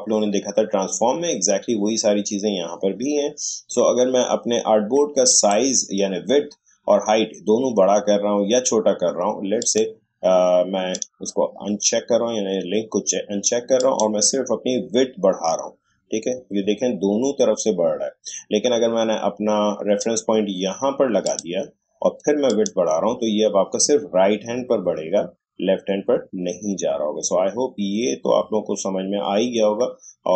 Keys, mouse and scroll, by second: 5.3 click, 9.6 click, 13.7 click, 14.5-16.3 scroll up 1, 22.7 click, 23.0-27.5 scroll up 1.